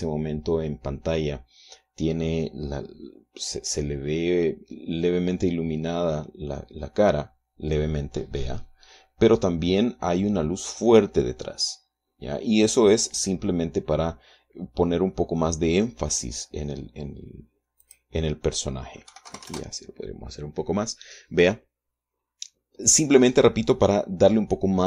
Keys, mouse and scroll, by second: 18.5 click, 19.8 KP_5, 20.0 KP_0, 20.2 KP_Enter.